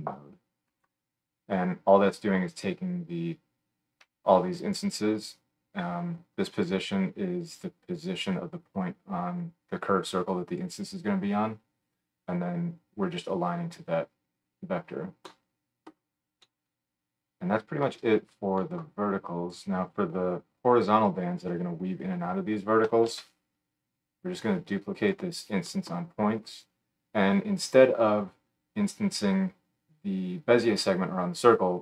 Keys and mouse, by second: 0.9-15.3 middle drag, 19.4 click, 23.1 shift+d, 25.1-31.8 middle drag.